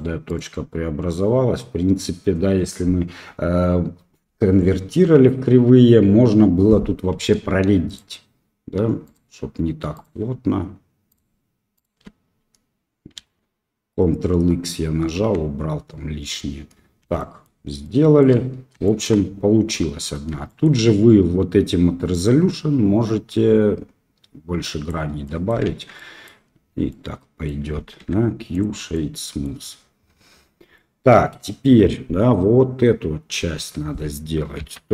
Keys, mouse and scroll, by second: 0.2 click, 7.8 shift+click, 9.0 shift+click, 9.9 shift+click, 11.7 shift+click, 13.1 ctrl+x, 15.1 Tab, 17.1 shift+middle drag, 17.8 shift+middle click, 18.8 shift+middle click, 20.4 shift+middle click, 22.6-24.8 drag, 25.2 middle drag, 25.6 shift+z, 25.9-26.2 middle drag, 26.8-27.4 middle drag, 27.9 q, 28.9-29.4 middle drag, 30.7-31.3 middle drag, 33.5 KP_1.